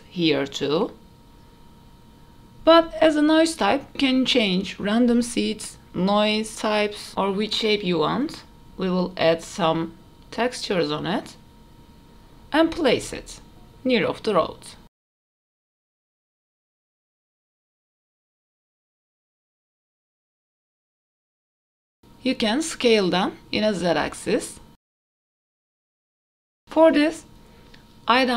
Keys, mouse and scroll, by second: 5.1 click, 5.7 click, 6.4 click, 7.4-9.2 drag, 9.9 click, 10.3 middle click, 10.9 s, 11.4 scroll down 1, 11.6 click, 11.8 right click, 12.1-12.6 scroll down 2, 12.4 middle click, 13.3 alt+h, 13.8 click, 14.2-15.1 scroll down 3, 14.9 s, 16.2 KP_7, 16.4 g, 16.6 middle click, 17.0 shift+d, 18.7 middle click, 18.8 scroll up 2, 19.0 g, 19.3 click, 19.6 KP_0, 21.8 click, 22.1 s, 25.2 click, 25.7 shift+middle click, 25.8 click, 26.2 middle click, 26.6 ctrl+s.